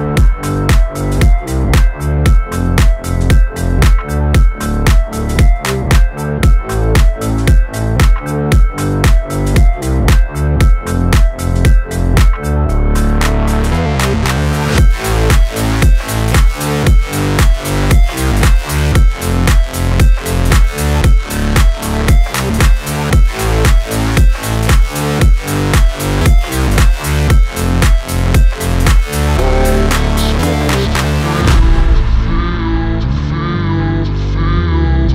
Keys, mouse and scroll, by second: 0.3 ctrl+v, 2.7 scroll down 1, 3.3 click, 3.9 scroll down 1, 4.8 click, 5.8 scroll down 1, 6.9 shift+click, 7.5 ctrl+v, 9.9 click, 12.7 click, 15.1-15.9 scroll down 1, 15.9-17.0 scroll up 1, 17.0 click, 17.7 scroll up 1, 19.2 scroll down 1, 19.9 click, 24.2 click, 26.1-27.0 scroll up 1, 27.0 click, 27.3-28.6 scroll down 1, 29.3-30.6 scroll up 1, 34.9 scroll up 1.